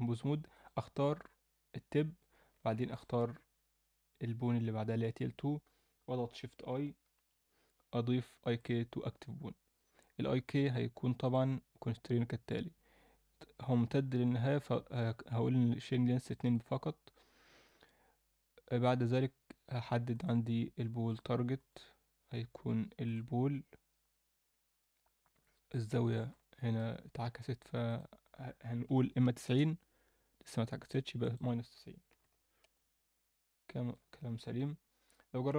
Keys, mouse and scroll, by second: 0.5 click, 2.9 shift+click, 7.2 shift+i, 9.7 drag, 11.2 click, 16.4 click, 20.1-21.1 drag, 21.6-23.1 drag, 26.3-26.7 middle drag, 27.9-29.4 drag, 30.8 click, 31.2-32.6 drag, 33.6 middle click, 34.5 KP_1, 35.4 KP_3.